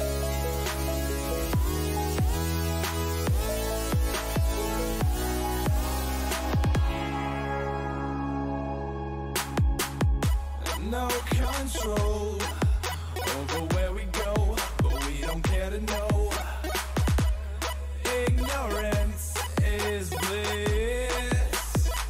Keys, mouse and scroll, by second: 2.4 b, 4.2 g, 6.7 a, 7.8 b, 9.3 g, 13.0 a, 13.8-15.5 middle drag, 15.1 b, 16.6 g, 18.3 a, 19.2 b, 20.8 g.